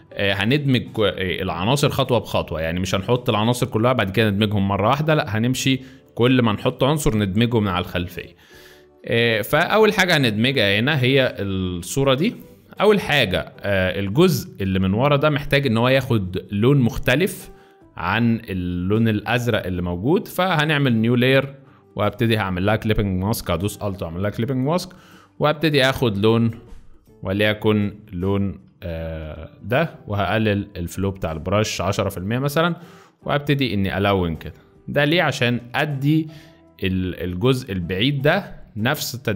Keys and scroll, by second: 0.4 space, 8.2 space, 9.3 space, 10.1 z, 11.2 space, 28.7 alt+], 28.9 alt+], 29.2 alt+], 29.6 alt+], 29.8 alt+], 35.7 space, 36.7 alt+space.